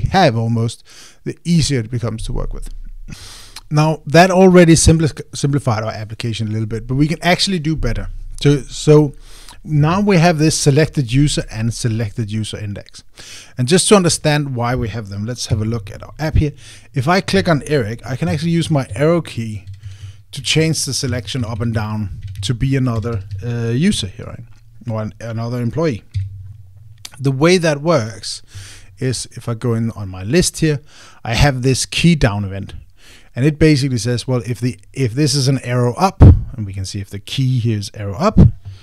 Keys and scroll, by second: 19.0 Down, 19.6 Down, 20.4 Up, 21.0 Up, 21.8 Down, 22.8 Down, 23.7 Up, 24.3 Up.